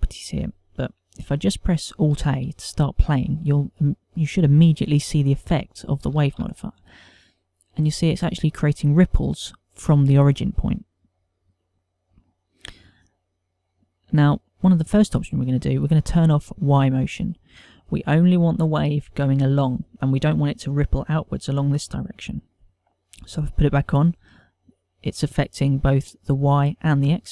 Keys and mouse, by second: 7.0 alt+a, 10.8 middle click, 12.2 middle click, 17.6 click, 24.4 click.